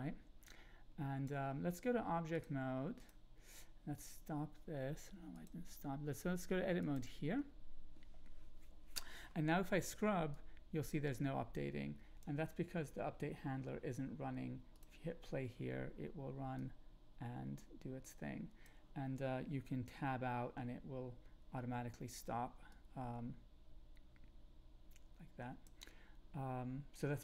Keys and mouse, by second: 2.5 click, 3.9 click, 5.3-6.9 drag, 10.3-12.2 drag, 16.5-18.6 drag, 19.8 Tab, 22.7-25.6 drag.